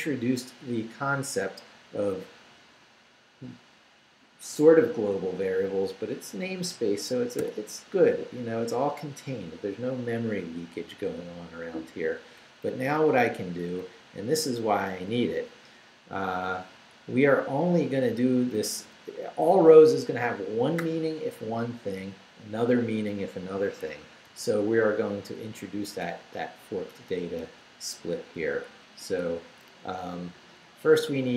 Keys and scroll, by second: 7.4 q, 11.6 Down, 12.2 Up, 12.6 Down, 13.4 Up, 17.5 Up, 19.9 Down, 24.3 o, 26.0 =, 26.9 BackSpace, 27.5 Return, 28.8 Tab.